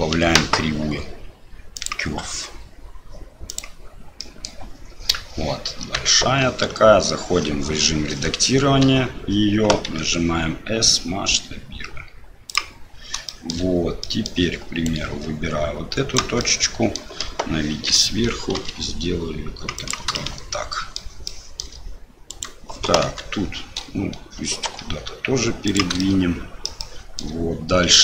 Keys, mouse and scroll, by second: 4.2 middle click, 6.1 Tab, 8.8 a, 9.8 s, 13.3 shift+middle click, 14.0 middle click, 16.1 right click, 16.5 middle click, 17.2 KP_7, 18.5 r, 20.2 shift+middle click, 21.3 shift+middle click, 22.3 click, 23.0 KP_7, 24.6 g, 26.0 shift+middle click, 26.9 shift+middle click.